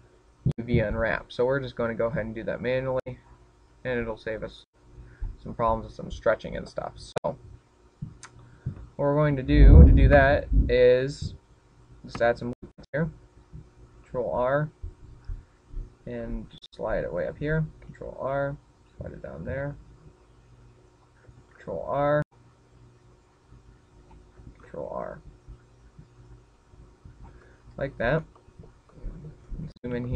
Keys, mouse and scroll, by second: 2.0 click, 8.4 scroll up 1, 9.0-10.2 scroll down 1, 11.2 KP_7, 13.2 ctrl+r, 18.4 click, 18.6 ctrl+r, 22.2 click, 22.7 ctrl+r, 25.3 click, 25.8 ctrl+r, 28.5 click, 28.8-29.4 scroll up 3, 29.6 shift+middle click.